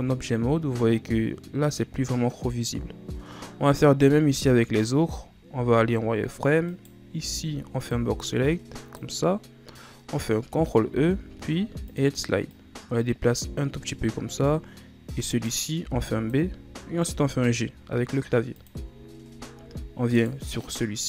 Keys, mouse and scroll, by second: 0.0-3.1 ctrl+scroll up 1, 3.7 scroll up 2, 4.2 Tab, 4.7-5.7 ctrl+scroll up 2, 5.7 z, 6.9 right click, 7.3 b, 11.0 ctrl+e, 15.5 right click, 16.0 b, 17.2 g, 19.1 ctrl+scroll up 3, 20.4 right click.